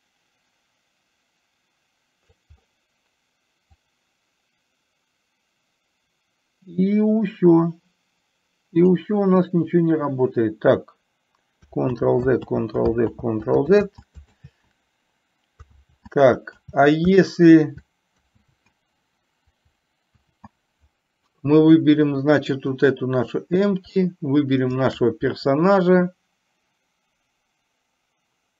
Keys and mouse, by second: 4.1-9.2 drag, 12.1 ctrl+z, 22.8-23.6 drag, 24.7 shift+click.